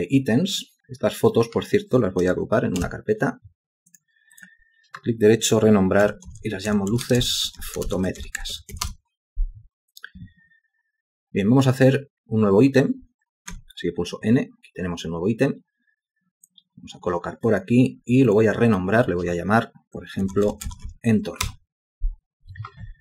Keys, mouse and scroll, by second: 2.8 ctrl+g, 5.8-9.2 typing, 13.5 n, 20.0-21.3 typing, 21.4 Return.